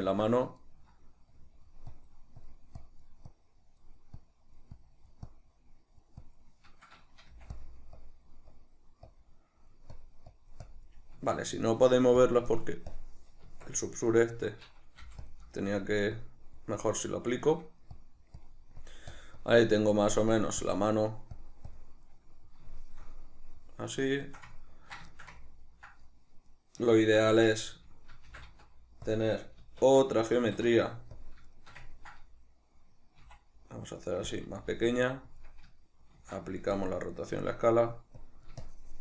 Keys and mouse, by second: 0.0 alt+q, 0.6 shift+middle click, 1.4-7.6 drag, 7.3 f, 8.0-12.3 drag, 11.1 Tab, 12.9 click, 13.4 Tab, 14.2-15.3 drag, 15.0 f, 15.6 shift+middle click, 16.2-17.4 drag, 17.4 shift+middle click, 18.0-19.5 drag, 19.8-22.1 drag, 22.1-29.1 middle drag, 27.3 Tab, 28.3 shift+d, 29.1 click, 29.6 alt+q, 31.6-34.3 shift+middle drag, 33.2 s, 34.3 click, 34.4 g, 35.4 click, 36.2 ctrl+a, 37.3 Tab, 38.2-39.0 drag.